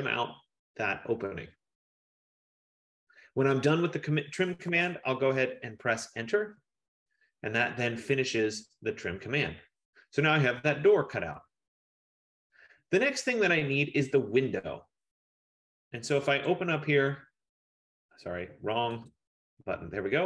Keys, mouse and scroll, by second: 6.4 F15, 9.9 Return, 16.6 click, 19.3 click.